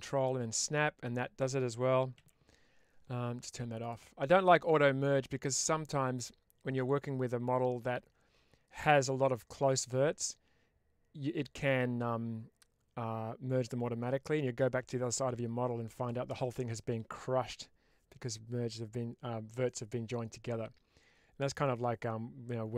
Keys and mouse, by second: 2.0 ctrl+z, 3.7 click, 4.4 click.